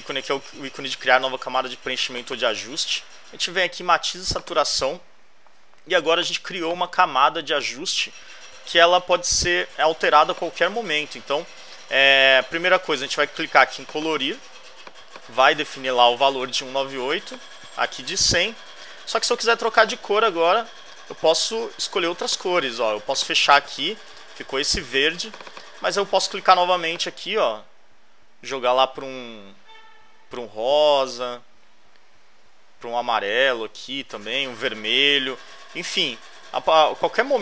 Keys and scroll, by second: 15.3-18.3 typing.